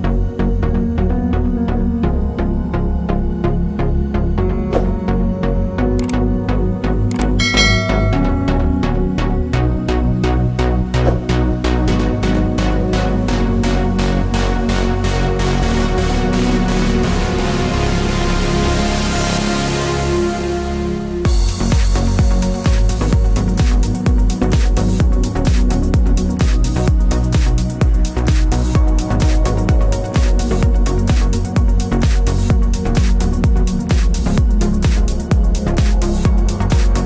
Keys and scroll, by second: 12.3 ctrl+0, 23.4 ctrl+s.